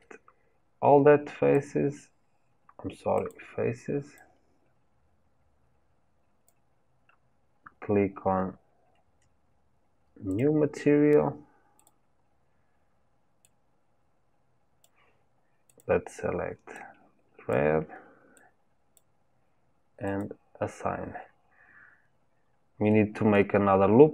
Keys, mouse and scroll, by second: 10.4-15.8 drag, 20.2-22.2 drag, 22.2-22.9 scroll up 2, 22.9-24.1 middle drag.